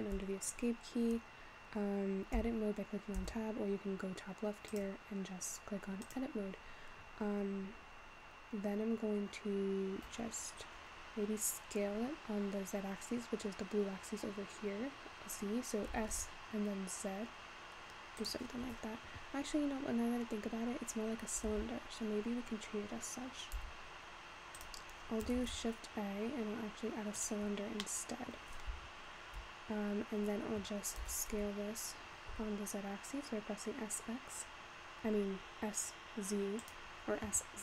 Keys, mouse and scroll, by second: 0.9-2.6 scroll up 2, 2.6 Tab, 3.2 Tab, 4.7-7.7 drag, 10.5-12.0 scroll down 3, 16.0 s, 21.5 Tab, 23.6 x, 25.4 shift+a, 27.8-28.8 middle drag, 28.8 `, 31.1 s.